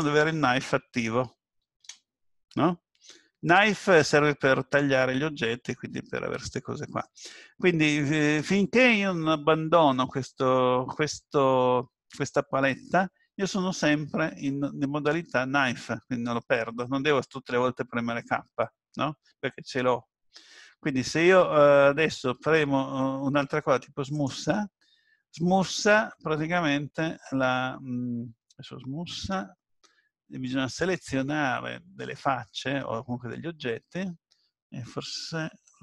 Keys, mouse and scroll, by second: 3.8 middle click, 5.5-6.1 scroll down 1, 6.5 scroll down 1, 7.1 middle click, 24.1 click.